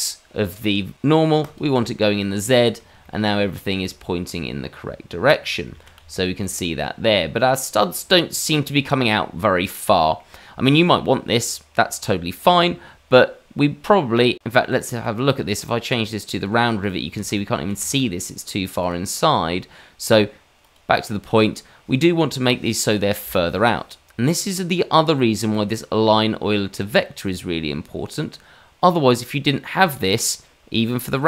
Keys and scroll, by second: 5.7 shift+z, 17.1 shift+z, 17.7 shift+z.